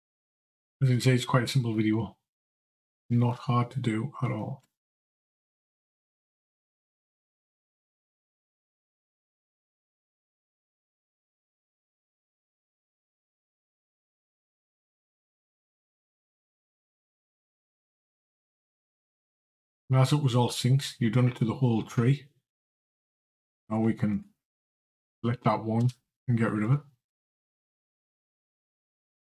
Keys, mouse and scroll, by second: 15.1 Delete, 23.7 click, 25.6 Delete.